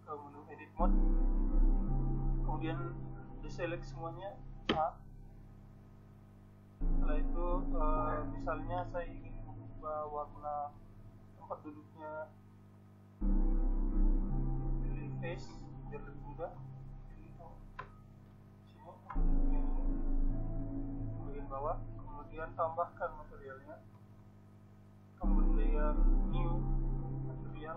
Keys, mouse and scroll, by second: 0.3 n, 2.9 Tab, 5.5 click, 6.1 middle click, 6.2-9.1 drag, 9.1 a, 10.8-12.1 middle drag, 12.1-13.7 drag, 13.7-14.9 middle drag, 14.9-16.8 right drag, 16.8 middle click, 19.6-21.5 drag, 20.6-22.4 right drag, 21.3 middle click, 22.8-25.5 middle drag.